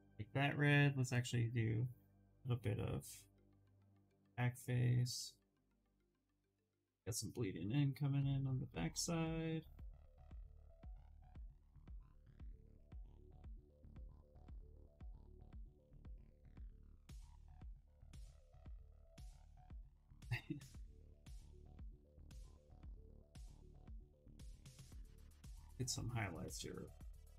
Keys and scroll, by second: 0.1 2, 15.4 v, 27.2 s.